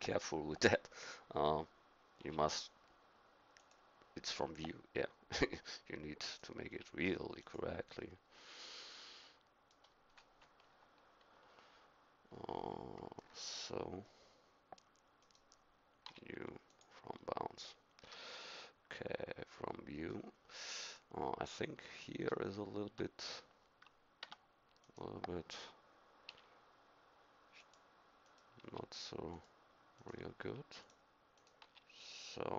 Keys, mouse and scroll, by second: 2.2 u, 6.3-8.7 drag, 6.7 u, 8.7-10.6 middle drag, 10.6 KP_3, 11.3 KP_1, 16.1 u, 18.1 a, 18.7 middle click, 20.9 KP_1, 22.9 Tab, 24.4 Tab, 26.3 u, 28.6 u, 30.4 u, 31.6 u.